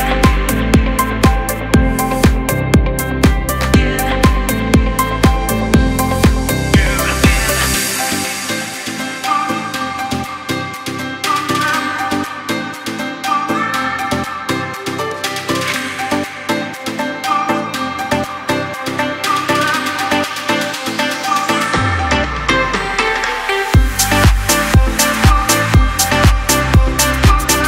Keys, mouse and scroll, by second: 3.0-3.3 alt+scroll up 1, 4.2 click, 4.5-9.5 drag, 10.0 click, 12.2 click, 21.3 space, 21.5 click, 21.8 space, 22.2 click, 25.6 alt+scroll up 1, 27.0-27.6 drag.